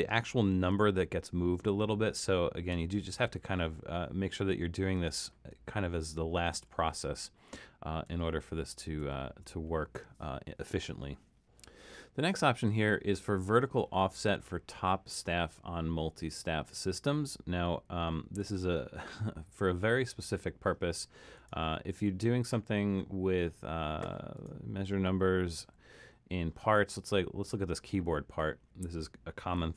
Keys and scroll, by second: 2.8 Down, 5.5 super+z, 6.5 super+z, 8.2 super+z, 9.0 super+z.